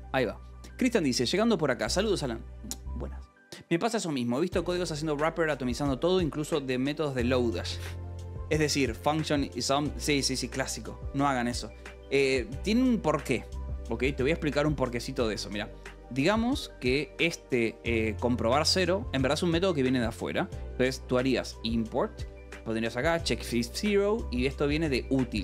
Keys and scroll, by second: 13.7 j, 14.3 k, 15.0 g, 16.7 j, 17.5 k, 18.2 h, 19.0 k, 20.4-22.4 typing, 23.9 ctrl+g, 24.0 o, 24.3 BackSpace, 24.6 Escape, 25.1 o.